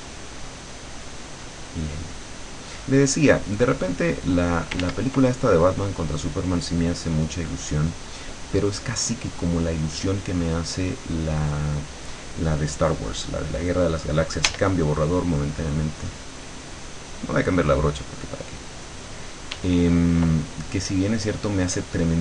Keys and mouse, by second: 0.0 click, 2.5 click, 3.6 click, 4.2 click, 4.9 ctrl+z, 5.6 ctrl+click, 6.7 click, 10.8 click, 14.5 e, 15.0-19.6 drag, 19.6 e.